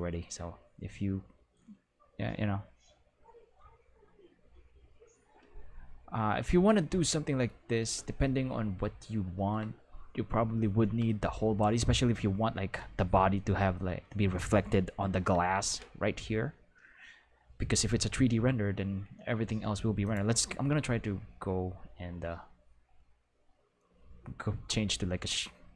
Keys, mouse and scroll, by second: 7.8 ctrl+s, 15.1 Home, 20.0 click.